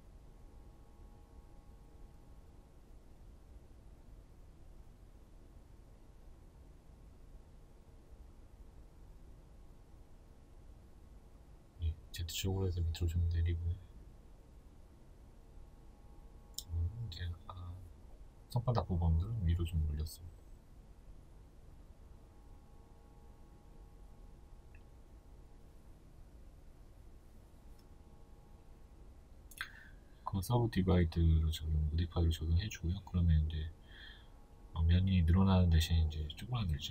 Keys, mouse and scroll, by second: 0.7 shift+right click, 1.2 middle click, 1.6 alt+right click, 1.8 alt+right click, 2.5 middle click, 2.9 shift+right click, 4.0 ctrl+z, 4.3 shift+right click, 4.6-5.7 middle drag, 5.7 shift+right click, 6.0 middle click, 6.5 shift+right click, 6.8-12.4 middle drag, 8.5 KP_1, 10.1 g, 12.4 click, 13.2 right click, 13.5 middle click, 14.0 right click, 14.4-16.6 middle drag, 15.3 g, 16.6 click, 18.4-30.7 middle drag, 26.3 Tab, 30.7 click, 31.6-36.9 shift+middle drag, 32.3-32.7 scroll up 2, 32.7-33.2 scroll down 2, 33.7-34.4 scroll up 2, 34.4-34.9 scroll down 2, 34.9 Tab.